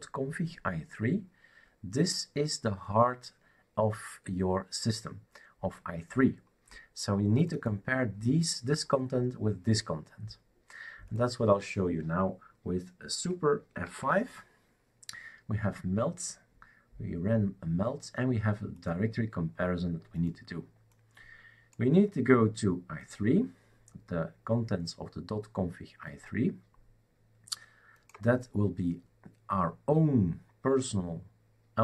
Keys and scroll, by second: 13.9 super+F5.